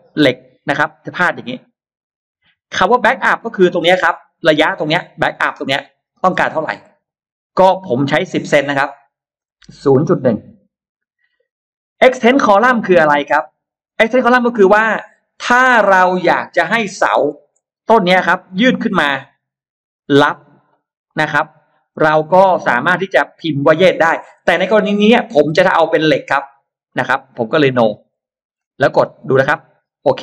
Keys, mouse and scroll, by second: 2.6-4.1 shift+drag, 5.3 shift+click, 6.7 shift+click, 7.3 shift+right click, 8.6 click, 9.9-10.7 typing, 17.2 shift+x, 17.7 click, 18.9 click, 19.8 click, 20.5 click, 21.2 shift+click, 21.7 shift+click, 22.1 shift+click, 25.4 shift+right click, 25.6 right click, 26.7 click, 27.9 click.